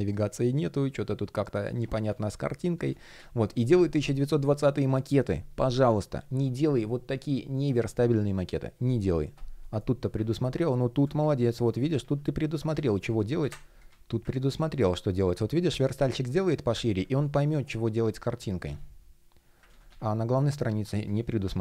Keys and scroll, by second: 9.3 shift+o, 11.2 shift+o, 16.9 shift+p, 19.4 super+z.